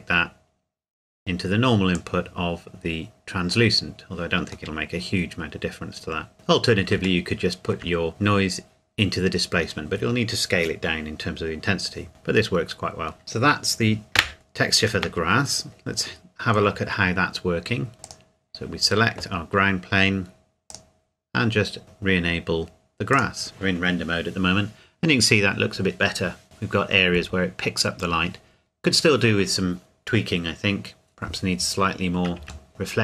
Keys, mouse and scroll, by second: 2.0 click, 4.7 middle click, 6.3-6.9 scroll up 1, 7.2 shift+middle click, 8.0-10.2 scroll up 1, 12.1 scroll down 1, 13.2 shift+middle click, 14.9 KP_0, 18.0 click, 20.7 click, 21.8 ctrl+s, 23.1 click, 32.7 shift+middle click.